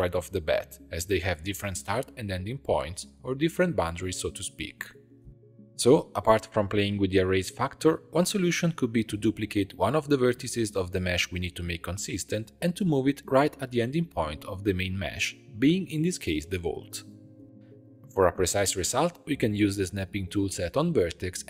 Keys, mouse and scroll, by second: 2.2-7.3 ctrl+middle drag, 7.3 Tab, 7.7 1, 8.6 click, 10.1 shift+d, 14.9 Tab, 15.1 click, 16.9 click, 18.3 click, 18.6 Tab, 20.3 click.